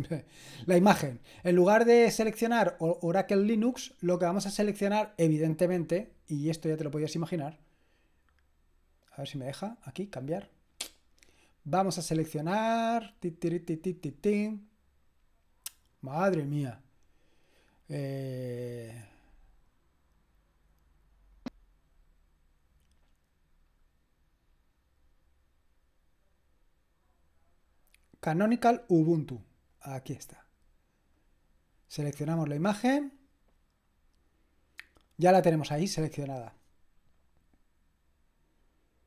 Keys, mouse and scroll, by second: 4.2 click, 7.1 click, 9.2 click, 19.0 click, 21.3 click, 24.4-27.6 scroll down 1, 29.0-30.6 drag, 32.2 click.